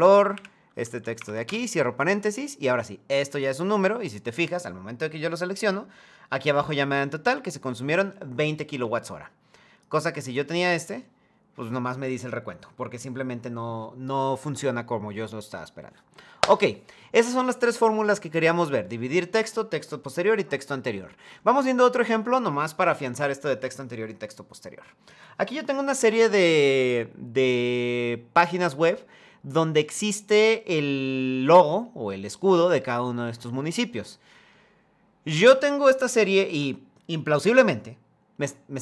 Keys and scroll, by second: 0.0 Left, 1.2 Return.